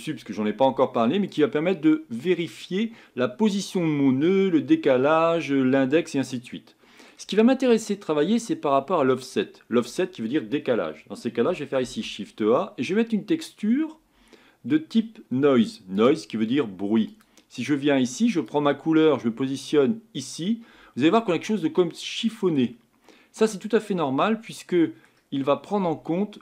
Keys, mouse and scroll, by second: 1.9-2.4 scroll down 4, 20.3 click, 21.2-26.4 middle drag.